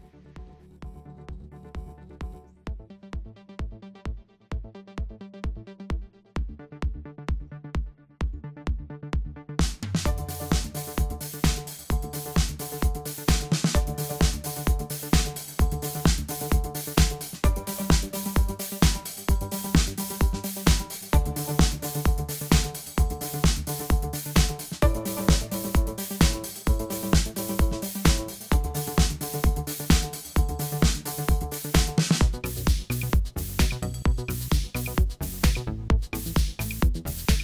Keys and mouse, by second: 0.9-2.2 middle drag, 2.2 b, 5.4-6.7 middle drag, 6.3 b, 10.3 middle click, 11.5 b, 13.4-14.7 drag, 15.3 b, 17.5 b, 18.8 click, 19.1 click, 20.1 b, 21.4 b, 25.7-27.6 middle drag, 28.7-29.8 middle drag, 29.8 click, 29.9-30.9 middle drag, 35.4-37.4 middle drag.